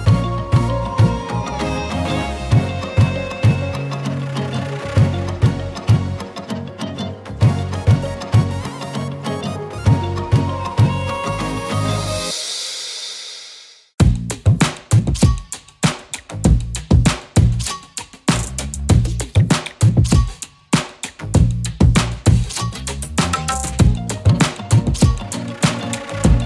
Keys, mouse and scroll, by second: 0.1 scroll up 1, 0.8 z, 1.3 z, 1.4 click, 1.7 space, 1.8 click, 2.0 z, 2.2 click, 2.6 click, 7.2 shift+click, 9.2 click, 11.7-12.6 alt+shift+click, 13.3 z, 13.5 click, 13.8-14.7 z, 14.6 z, 14.7 space, 14.8 click, 17.4 click, 18.5 ctrl+c, 18.8 ctrl+f, 20.2-22.3 shift+drag, 23.3-25.2 alt+shift+drag, 26.2 click.